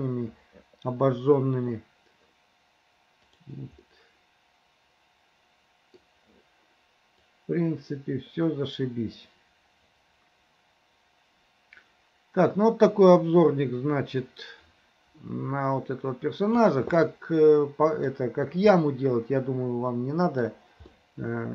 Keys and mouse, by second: 3.3 middle click, 3.9-6.0 middle drag, 7.3-16.7 right drag, 17.0-18.1 middle drag, 18.8-20.5 middle drag, 21.0-21.5 middle drag.